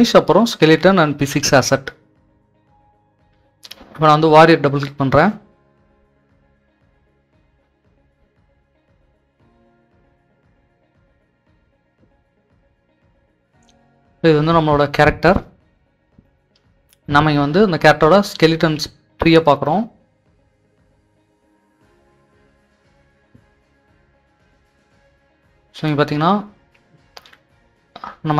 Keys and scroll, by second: 9.8-14.5 typing, 18.7-19.5 typing, 21.2 typing, 25.3-27.0 typing.